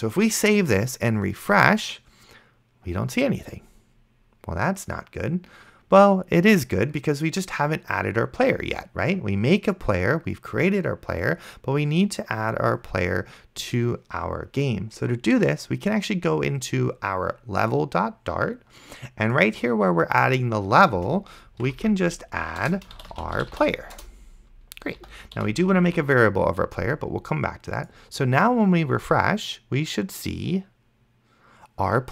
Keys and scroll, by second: 21.2 Return, 21.3-24.3 typing, 22.6 Return, 25.0 End, 25.4 ;, 26.1 ctrl+s.